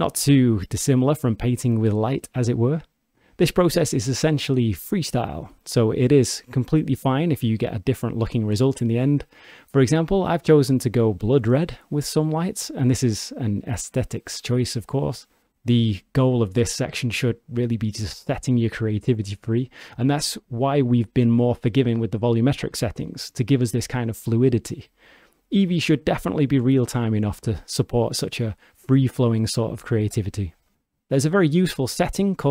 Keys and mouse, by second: 0.6 click, 1.5-2.1 alt+drag, 2.1 alt+middle drag, 2.7 g, 3.8 click, 4.1 alt+shift+drag, 4.6 g, 5.1 click, 5.5 g, 7.2 click, 7.8 g, 8.4 click, 10.6 click, 16.0-17.3 drag, 18.7 shift+d, 20.7 click, 21.5 click, 23.0 g, 23.5 alt+shift+middle drag, 23.7 alt+click, 24.1 g, 25.4 g, 27.4 click, 31.9-32.5 drag.